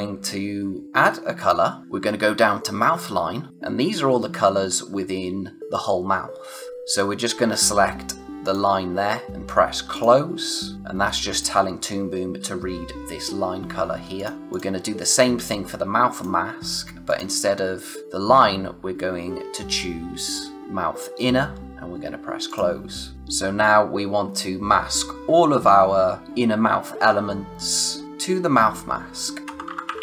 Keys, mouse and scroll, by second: 1.3 click, 8.4 click, 9.9 click, 11.3 click, 14.1 click, 20.5 click, 22.4 click, 29.4-30.0 typing, 29.4 click.